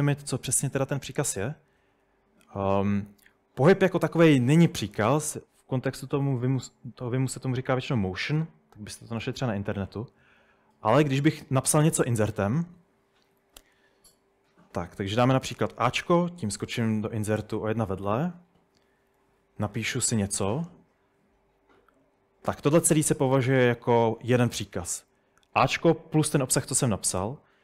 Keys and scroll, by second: 3.7-5.3 typing, 12.8-13.3 typing, 15.9 a, 19.9-20.3 typing, 22.6 Escape.